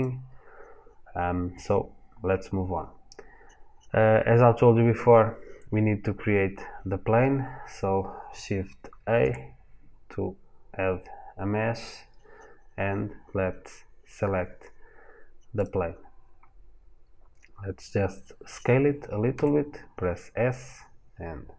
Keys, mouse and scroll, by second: 8.8 shift+a, 19.1 s.